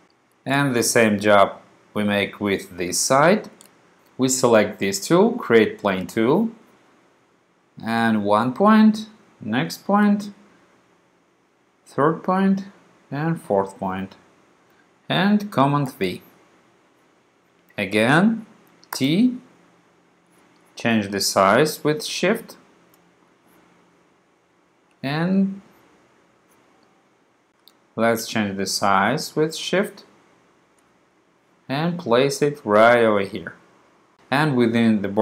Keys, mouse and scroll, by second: 6.0 click, 8.1 click, 10.1 click, 12.2 click, 14.1 click, 16.0 super+v, 19.0 t, 20.3-23.2 drag, 23.4-24.9 drag, 25.6-27.5 drag, 27.5 shift+super+z, 29.8 shift+click, 30.1 shift+click, 30.8 shift+click, 31.3-33.2 drag, 33.5-34.2 drag.